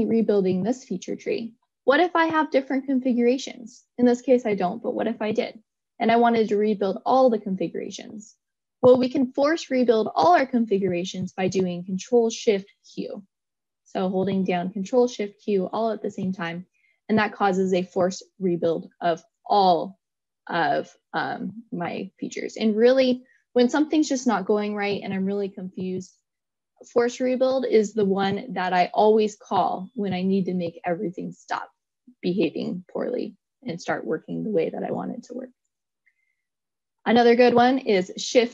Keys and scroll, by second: 12.9 ctrl+shift+q.